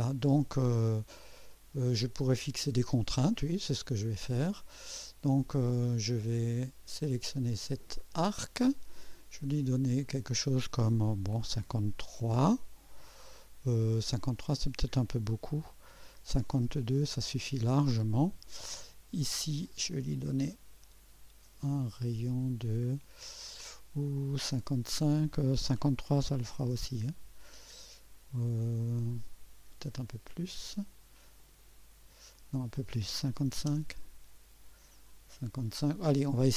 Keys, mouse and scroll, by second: 4.7 right click, 5.6 right click, 6.3 right click, 8.0 click, 9.1 click, 11.5 KP_5, 12.9 KP_3, 15.5 BackSpace, 16.2 2, 16.5 Return, 19.6 click, 22.3 click, 26.0-27.0 typing, 31.4 click, 33.3-33.9 typing, 33.7 Return.